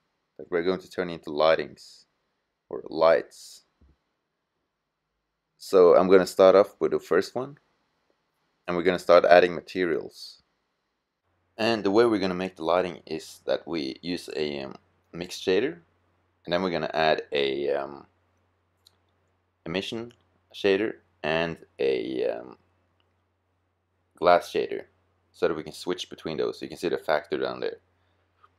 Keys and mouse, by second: 5.4-6.8 middle drag, 6.8-13.1 drag, 16.1-19.3 middle drag, 20.9 click.